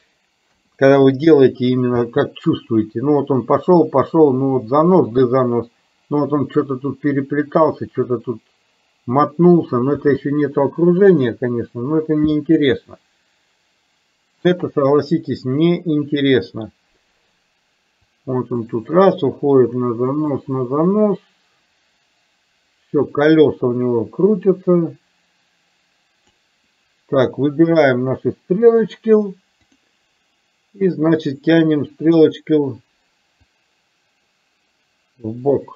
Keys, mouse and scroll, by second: 0.6 KP_0, 2.1 space, 10.1 space, 18.2-26.5 drag, 29.7 click, 33.6-35.7 drag.